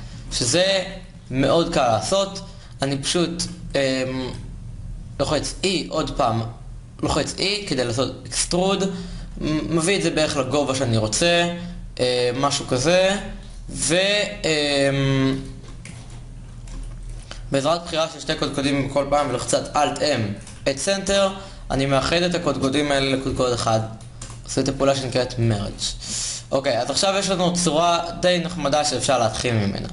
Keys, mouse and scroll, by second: 5.0 e, 16.2 ctrl+Tab, 19.4 alt+m, 20.4 Down, 23.0 alt+m, 25.2 Tab.